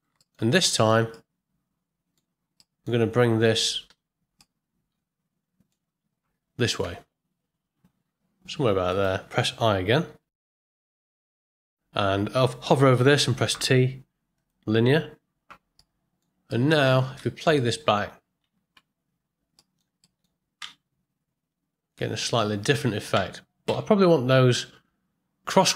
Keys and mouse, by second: 0.7 ctrl+middle click, 1.2 middle click, 2.6 shift+middle click, 4.5-5.7 middle drag, 6.8 g, 10.0 i, 13.5 t, 15.7-16.2 middle drag, 16.5 ctrl+middle click, 17.3 shift+middle click, 17.6-18.0 middle drag, 18.6 shift+Left, 19.6 click, 20.0 ctrl+click, 20.6 space, 23.1 space, 23.7 shift+Left.